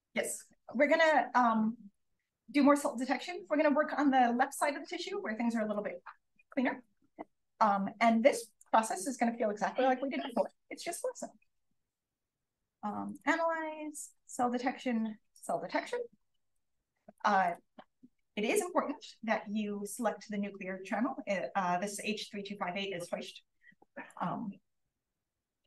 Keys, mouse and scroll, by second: 1.9 click, 3.1-6.7 drag, 18.1 click, 24.0 click.